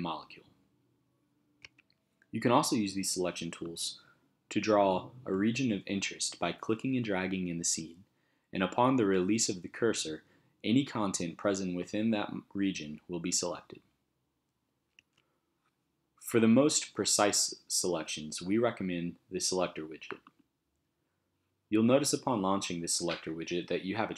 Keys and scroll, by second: 1.6 space, 15.0 space.